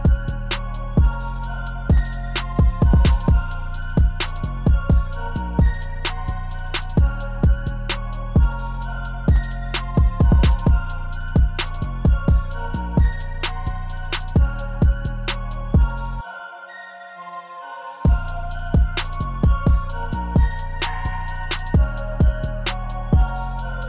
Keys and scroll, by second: 13.1 0.